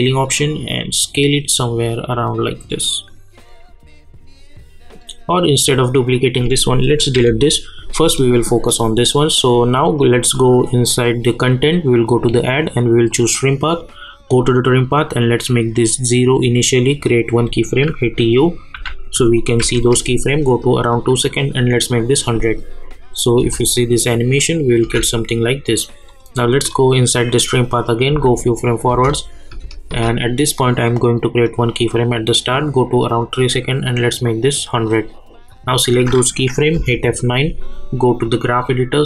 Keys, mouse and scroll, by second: 18.7-20.1 typing, 20.9 click, 23.4 space, 25.1 click, 28.1 space, 31.4-36.7 drag, 36.7 F9, 37.2 click.